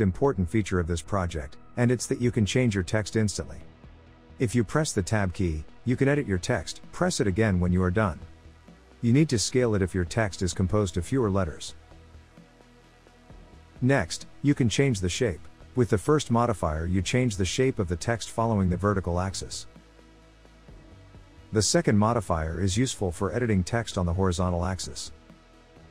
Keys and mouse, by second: 1.4 BackSpace, 2.8 z, 3.3 e, 3.4 r, 3.8 o, 6.1 Tab, 7.4-9.0 drag, 9.6 s, 11.6 click, 15.6-20.0 drag, 21.3-25.9 drag.